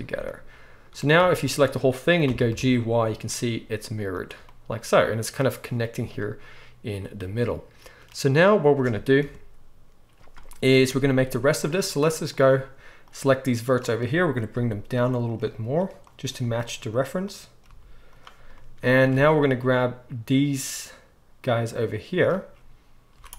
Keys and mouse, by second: 1.1 a, 2.2 g, 5.1 click, 5.5-12.3 middle drag, 9.2 KP_1, 11.2 z, 12.3-15.3 drag, 14.5 g, 15.3 middle click, 16.1 click, 16.4 g, 16.9 middle click, 17.3 click, 17.6 g, 18.1-19.3 middle drag, 19.1 alt+a, 19.3-23.3 drag, 23.1 z.